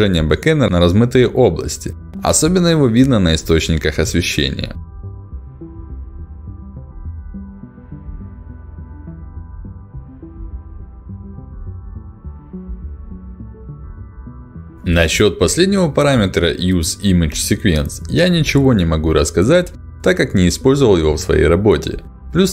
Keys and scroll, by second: 6.6 ctrl+alt+d.